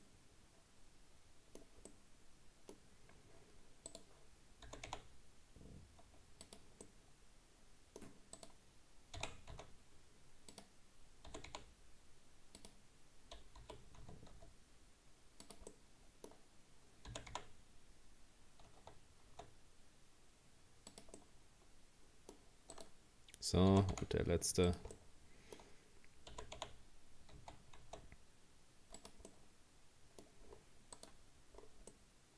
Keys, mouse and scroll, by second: 0.0-3.9 middle drag, 3.9 right click, 4.7 g, 6.9-8.4 middle drag, 8.4 right click, 9.2 r, 11.3 g, 13.6 g, 15.7-17.1 middle drag, 17.1 g, 21.2-22.8 middle drag, 22.8 right click, 23.7 g, 25.0-26.3 middle drag, 26.3 g, 29.3-30.5 middle drag, 30.5-31.0 scroll down 2, 31.0 right click, 31.6-31.9 scroll down 1, 31.9-32.3 middle drag.